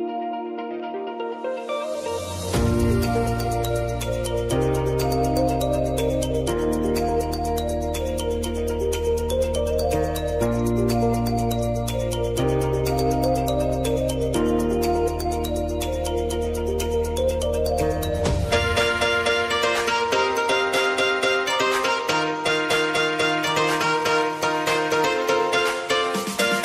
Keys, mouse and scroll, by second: 0.0 click, 0.8 typing, 2.7 click, 3.3 Up, 5.0 click, 5.2 Right, 6.5 click, 7.9 ctrl+c, 8.1 ctrl+v, 10.3 click, 11.3 F9, 11.8 click, 12.1 F9, 13.1 alt+click, 13.7-14.8 typing, 14.9 Down, 15.3 Return, 16.8 click, 19.0 p, 19.7 click, 20.2-21.3 typing, 22.2 click, 23.0 Up, 25.1 click, 25.9 Right.